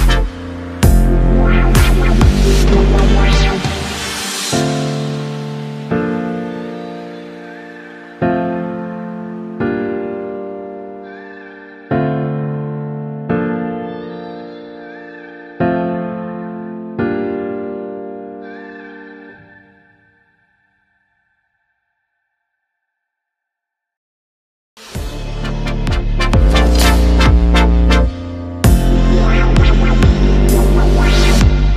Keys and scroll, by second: 0.6 Left, 1.5 Down, 4.4 Down, 4.4 Right, 4.6 Down, 4.6 Right, 4.8 Down, 5.0 Right, 6.0 Right, 6.0 Down, 20.5 ctrl+-, 21.6 ctrl+0.